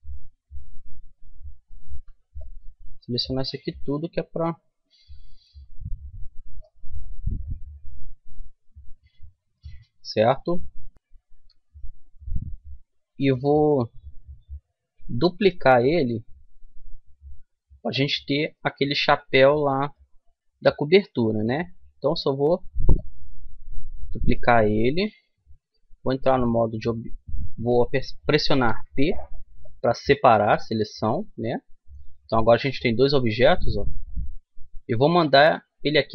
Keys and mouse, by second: 1.9 c, 7.0 right click, 7.4-9.1 middle drag, 14.9 shift+d, 18.7-24.4 middle drag, 24.4 click, 25.3 Tab, 26.8 Tab, 28.3 p, 30.8 Tab, 31.9-34.8 right drag.